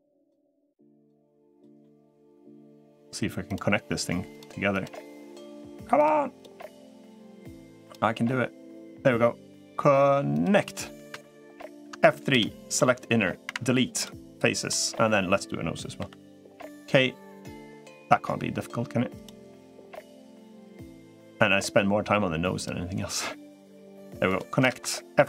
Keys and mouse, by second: 10.7 click, 11.9 F3, 12.5 middle click, 13.6 Delete, 14.4 middle click, 15.8 k, 25.1 F3.